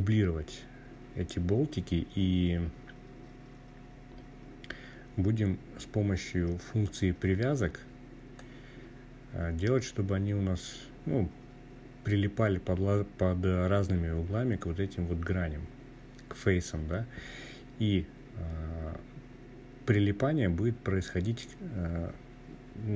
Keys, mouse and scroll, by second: 5.5-7.2 drag, 7.5-8.5 scroll down 3, 19.4-22.6 scroll up 2.